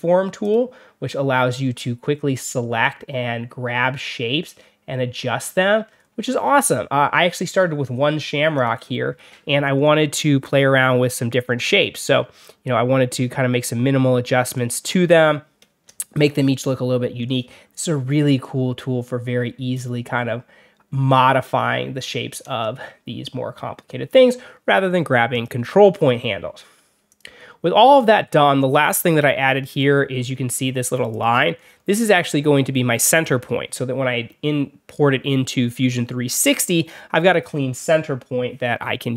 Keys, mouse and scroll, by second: 0.3 click, 1.0-1.9 alt+scroll up 4, 1.9 alt+middle click, 2.7-5.3 drag, 5.8 alt+middle click, 6.4 alt+middle click, 8.5 click, 9.1 alt+scroll down 2, 9.5-10.0 alt+scroll up 2, 10.3 alt+scroll down 3, 10.7 alt+scroll up 2, 10.7 alt+middle click, 11.4 alt+middle click, 12.3-14.5 drag, 16.3 alt+middle click, 16.3 alt+scroll down 1, 17.1-17.6 alt+scroll up 1, 18.3-21.4 drag, 24.1 alt+middle click, 25.2 click, 25.9 alt+middle click, 25.9-26.2 alt+scroll down 2, 27.0 click, 27.4 alt+scroll down 1, 27.7-28.0 alt+scroll up 4, 28.0 alt+scroll down 2, 31.0 click, 31.5-31.8 alt+scroll up 2.